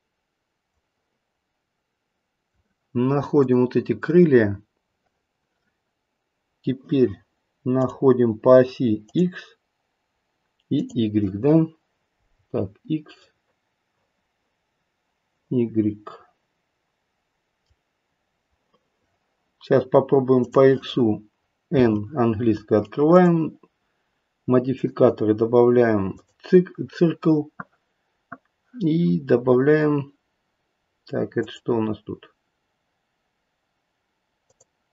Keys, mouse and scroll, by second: 0.6 click, 3.3 click, 7.7 click, 9.0 click, 10.6 click, 13.2 middle click, 17.5 middle click, 20.4 click, 21.7 n, 23.0 click, 24.6 click, 31.4 click.